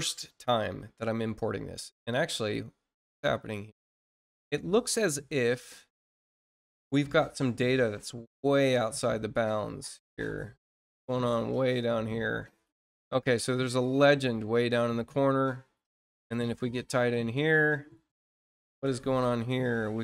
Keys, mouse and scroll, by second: 1.5-2.3 scroll down 4, 3.0-3.4 scroll up 2, 4.3-4.7 scroll up 2, 5.4-5.8 scroll down 2, 6.8-7.2 scroll up 2, 7.5-8.2 scroll up 4, 8.5 scroll up 2, 9.0-9.7 scroll up 4, 10.0-10.4 scroll up 2, 10.7 scroll up 2, 11.2-11.5 scroll up 2, 12.7-14.3 scroll down 8, 14.7-16.9 scroll up 6, 17.3 scroll up 1, 17.8 scroll up 1, 18.4-18.7 scroll up 1, 19.2-19.6 scroll up 1.